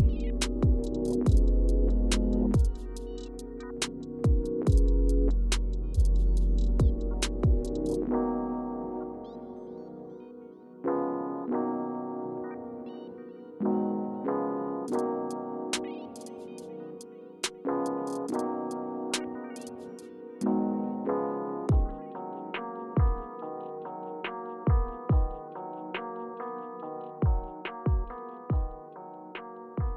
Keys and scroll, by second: 5.5 Return, 8.6-9.7 typing, 28.9 Return.